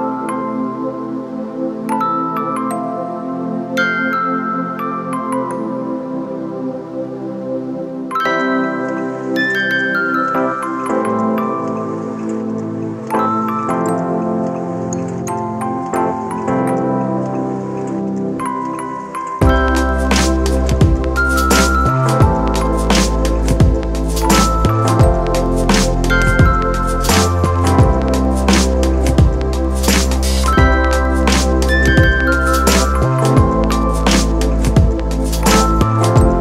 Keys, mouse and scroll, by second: 3.1 ctrl+click, 10.4 ctrl+d, 17.9 ctrl+click, 19.9 ctrl+click.